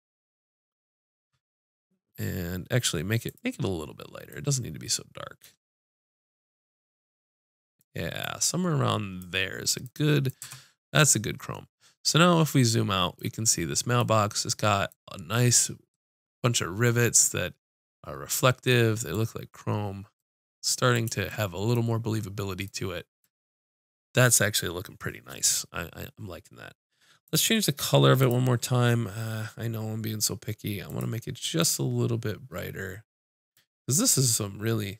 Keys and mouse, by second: 3.3-8.0 drag, 10.4 Tab, 28.2-33.3 drag.